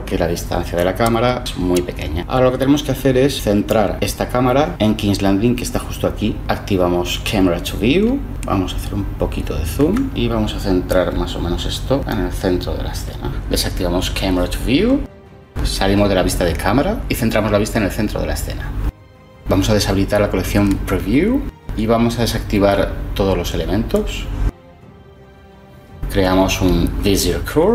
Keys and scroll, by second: 0.8 0, 1.4 Return, 15.5 0, 17.0 shift+c, 25.4 shift+a.